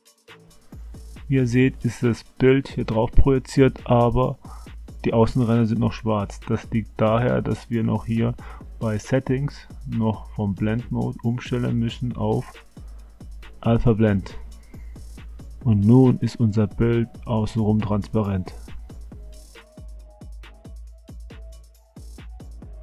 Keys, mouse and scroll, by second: 0.0 click, 1.3 drag, 9.8-14.4 drag, 15.6-17.9 middle drag, 20.9-21.4 shift+middle drag.